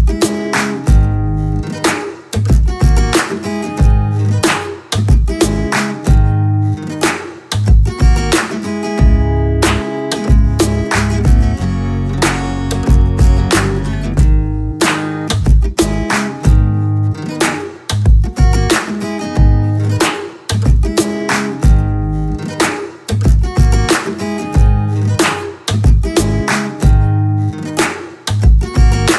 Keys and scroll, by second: 7.5 Down, 17.0 Return, 19.6 ctrl+alt+shift+Return, 20.9 b, 23.8 ctrl+z, 25.3 ctrl+KP_Add, 25.4 space, 25.9 KP_Add, 25.9 n, 26.3 space, 27.2 space.